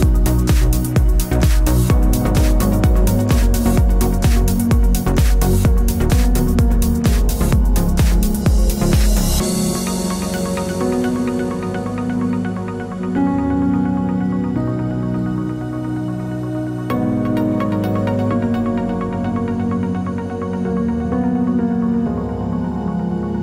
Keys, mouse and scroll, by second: 0.0 click, 0.6 click, 0.8-1.5 scroll down 2, 1.5 click, 2.6 h, 6.9 click, 7.2 click, 8.2 r, 19.6-22.2 scroll down 1, 23.2 click.